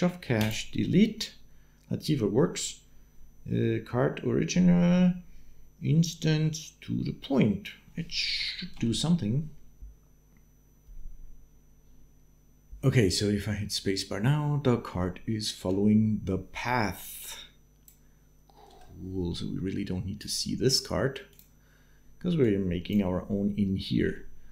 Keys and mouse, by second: 8.2 shift+Left, 8.5 space, 12.7 space, 14.7 shift+click, 17.0 click, 19.0 space, 20.0 click, 21.1 click, 22.4 click, 23.9 shift+click, 24.1 shift+middle click.